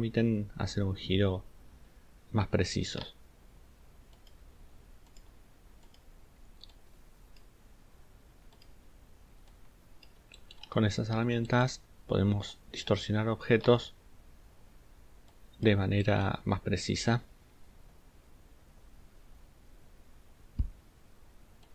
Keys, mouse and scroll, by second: 10.8-11.1 ctrl+scroll down 2, 11.4 ctrl+click, 13.3 ctrl+scroll up 1.